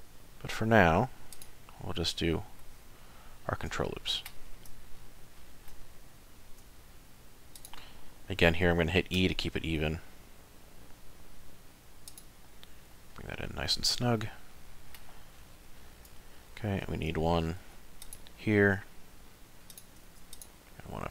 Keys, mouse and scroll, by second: 1.6 middle click, 3.0 shift+middle click, 3.8 middle click, 4.9-5.3 scroll down 1, 5.4 shift+middle click, 6.4 ctrl+r, 12.5 middle click, 13.1-14.3 scroll up 3, 14.3 middle click, 15.3 scroll down 3, 15.8 shift+middle click, 16.3 ctrl+middle click, 17.6 ctrl+r, 20.1 ctrl+r.